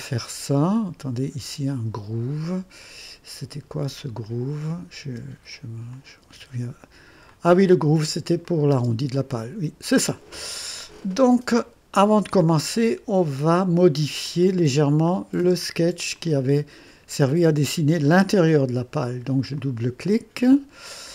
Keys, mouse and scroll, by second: 4.2 click, 5.0 space, 5.9 click, 6.2 space, 7.3-8.0 drag, 8.4 click, 8.7 typing, 9.2-10.5 drag, 11.5-12.5 drag, 14.2 click, 15.1 click, 15.4 space, 16.2-17.5 drag, 19.5 click, 20.9-21.1 scroll up 1.